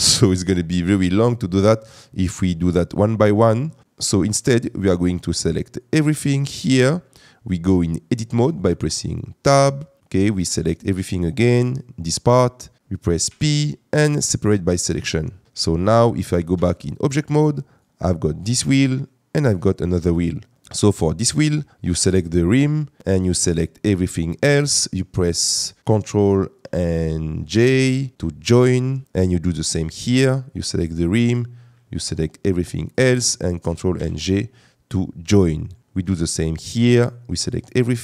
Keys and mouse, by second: 3.0 shift+middle click, 5.7 drag, 9.5 Tab, 12.8 ctrl+z, 13.3 p, 16.5 Tab, 17.0 click, 27.5 ctrl+j, 29.6 middle click, 30.5 click, 32.1 shift+drag, 34.0 ctrl+j.